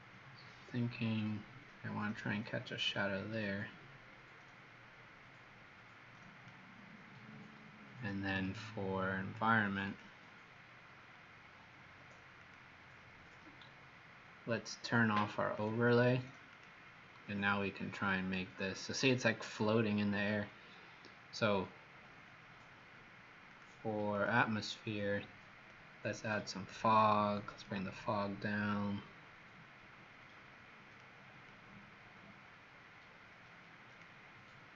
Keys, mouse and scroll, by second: 24.1 click, 25.6 click.